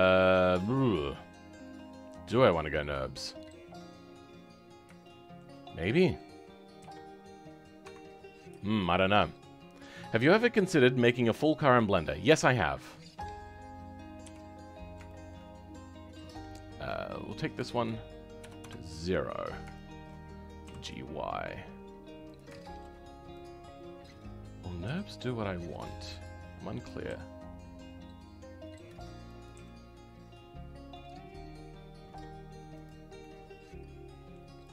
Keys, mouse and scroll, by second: 0.7 scroll down 2, 1.0-3.0 middle drag, 3.0 scroll up 2, 5.0-6.0 shift+middle drag, 6.0 click, 8.6-14.1 shift+middle drag, 14.1 KP_7, 14.6 scroll down 2, 15.0-18.5 shift+middle drag, 18.5-19.7 drag, 19.7 shift+middle click, 20.6 g, 22.5 shift+middle click, 23.3 click, 33.1-34.7 middle drag.